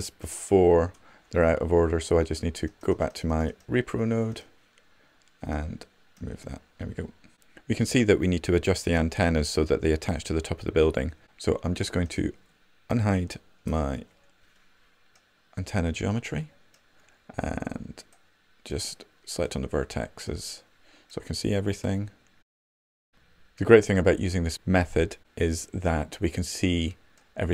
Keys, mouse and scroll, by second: 13.5 shift+h, 18.3-21.3 middle drag.